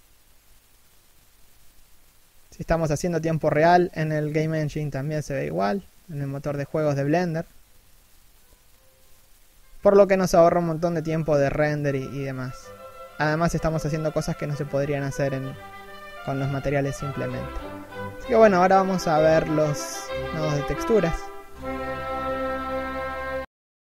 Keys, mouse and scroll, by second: 2.8 middle click, 3.8 middle click, 4.3-4.7 scroll down 1, 4.7 shift+middle click, 4.9 scroll up 1, 8.4 scroll up 1, 8.9 0, 9.3 a, 10.6 shift+middle click.